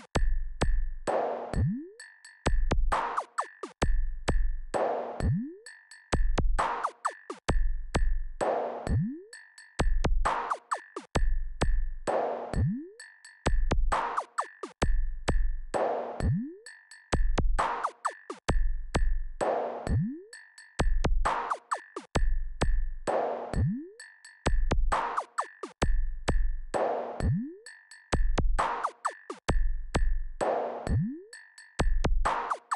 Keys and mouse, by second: 0.5 click, 3.7-15.1 drag, 21.4-32.7 drag.